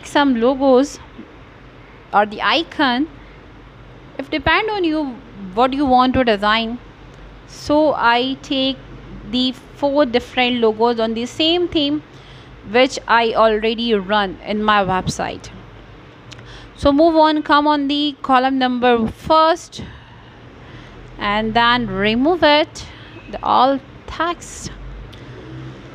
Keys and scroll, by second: 14.1 BackSpace, 15.7-18.7 typing, 19.7-21.4 typing, 21.5 Return, 24.6 g.